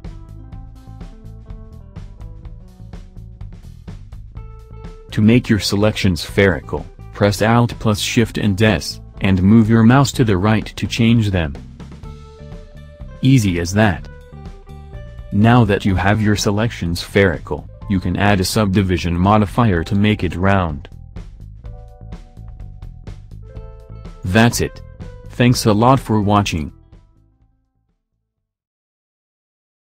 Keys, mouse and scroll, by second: 0.0 click, 1.0 ctrl+z, 2.9 click, 4.0 c, 5.9 l, 8.1 alt+shift+s, 16.2 click, 16.9 click, 19.8 click, 20.2 click, 20.8 click, 21.8 middle click, 23.1 Tab, 23.7 click, 24.2 middle click, 26.8 click, 29.8 l.